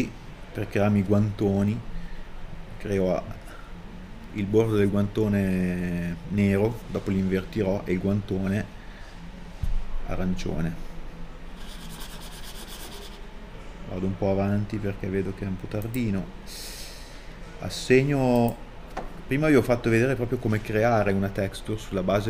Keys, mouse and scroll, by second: 11.2 scroll down 1, 12.0 middle click, 13.7-14.2 scroll down 1, 18.3 middle click, 18.5-19.5 scroll down 1, 19.5 middle click, 20.8 right click.